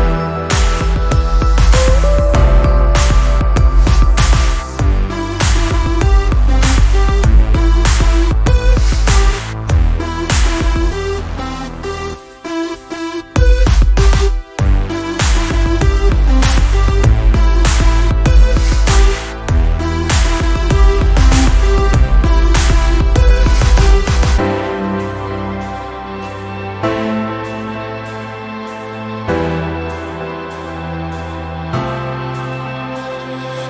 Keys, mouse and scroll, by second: 1.4 ctrl+scroll down 1, 4.9 ctrl+scroll up 1, 7.9 r, 11.1 m, 11.7 click, 11.8-13.0 drag, 13.4 v, 13.9 shift+click, 15.2 ctrl+d, 16.8 click, 17.8 ctrl+z, 18.0 click, 19.2 ctrl+z, 19.5 click, 21.0 ctrl+z, 21.8 ctrl+j, 22.9 click, 23.5 ctrl+j, 24.4 shift+click, 25.8 click, 27.8 Delete, 28.8-29.4 click, 29.5 ctrl+z, 30.9 click, 32.4 Delete, 33.1 v.